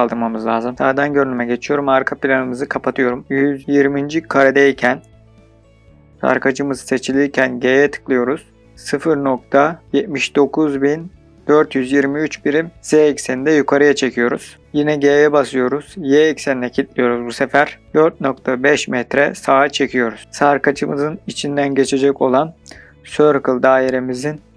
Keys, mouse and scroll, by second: 0.7 click, 1.9-3.2 drag, 3.3-6.2 drag, 8.2 g, 8.5 z, 9.7-12.0 typing, 14.4 KP_Enter, 14.5 g, 15.3 y, 17.8 KP_4, 18.2 KP_Decimal, 18.5 KP_5, 19.2 KP_Enter.